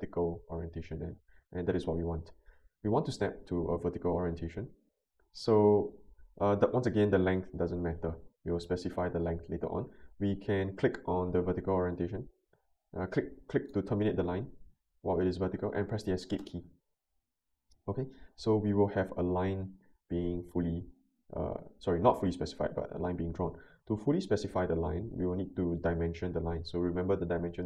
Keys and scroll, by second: 16.4 Escape.